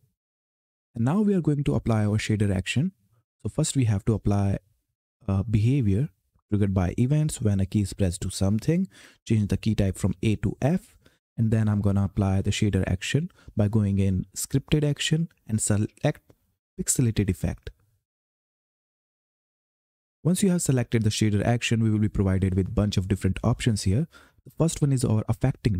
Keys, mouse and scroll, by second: 2.0 click, 7.8 click, 10.3 f, 11.3 click, 17.1 click, 19.8-25.5 drag.